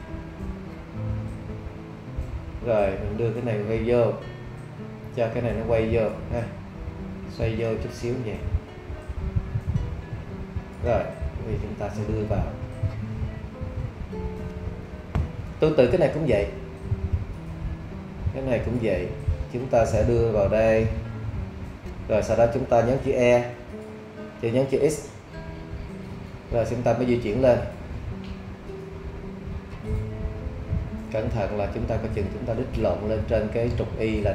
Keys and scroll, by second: 23.5 shift+e, 24.7 x.